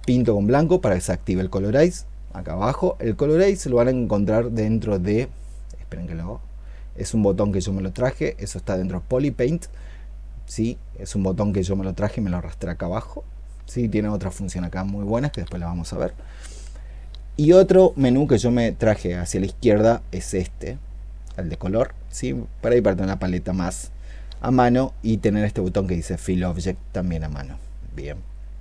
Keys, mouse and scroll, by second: 0.1 '.